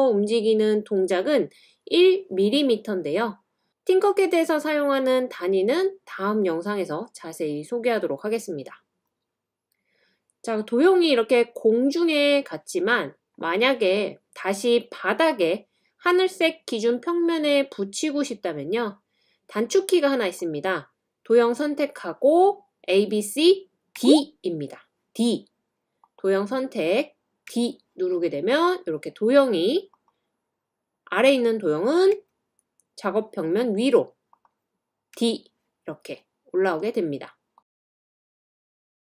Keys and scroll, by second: 17.3 typing, 23.7-24.4 typing, 27.5 typing, 32.1 typing, 35.1 typing, 36.8-39.0 typing.